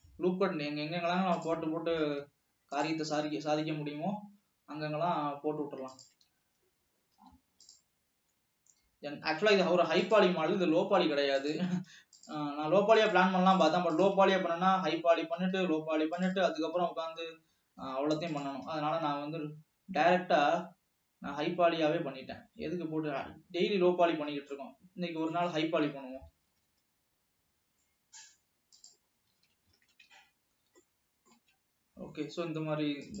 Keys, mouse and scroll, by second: 2.3 ctrl+r, 6.8 alt+a, 7.3 ctrl+r, 10.6 alt+a, 11.6 click, 12.3 click, 13.0 shift+click, 13.8 shift+click, 15.4 alt+e, 17.1 s, 18.8 e, 24.9 middle click, 25.8-26.3 scroll up 3, 26.4 g, 29.2 scroll down 3, 29.6 alt+a, 30.0 ctrl+s, 30.3 Tab, 30.6 scroll down 1, 30.8-31.8 middle drag, 31.8 Tab.